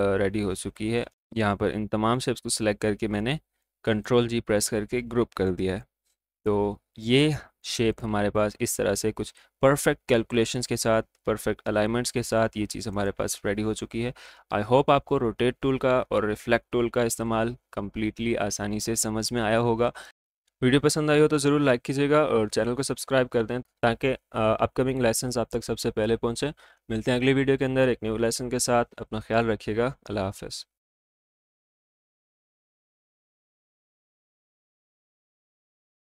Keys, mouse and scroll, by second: 0.5 alt+scroll up 1, 1.1 click, 2.3 right click, 3.3-5.1 drag, 5.1-5.8 alt+scroll up 1, 5.8 space, 7.0 click, 12.9 click.